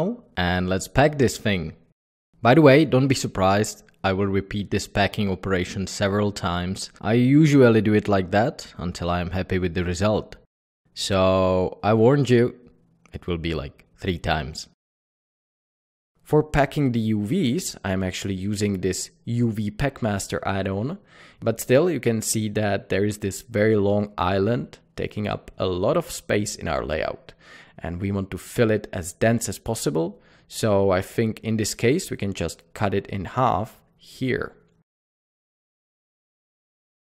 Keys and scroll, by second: 15.2 typing, 18.1 a, 35.2 t.